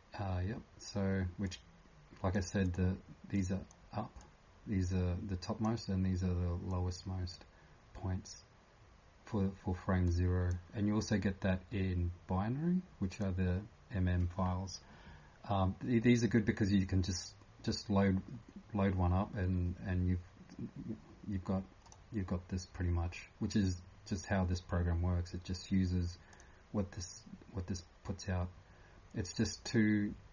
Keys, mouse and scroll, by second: 26.3 click.